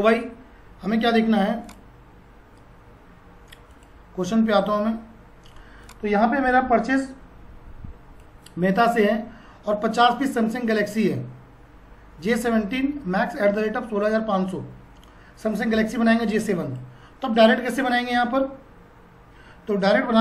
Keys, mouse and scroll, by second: 1.6 click, 7.3-16.6 drag, 20.1 F4.